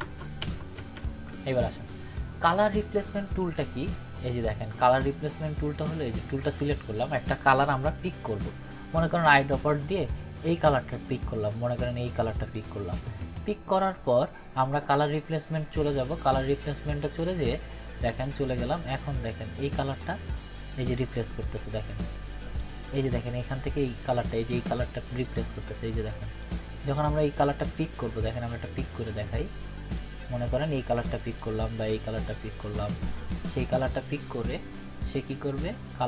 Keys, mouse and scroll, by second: 4.4-5.1 click, 7.7 ctrl+=, 9.5 click, 14.6 click, 15.6-16.6 drag.